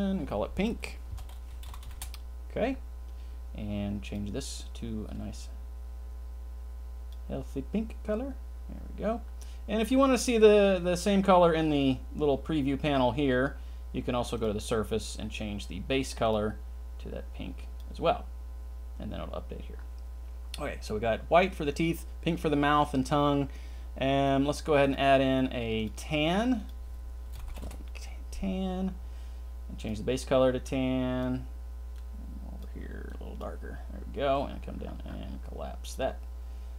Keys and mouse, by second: 4.1 click, 14.4 drag, 16.3 drag, 26.5-27.6 drag, 35.8 click.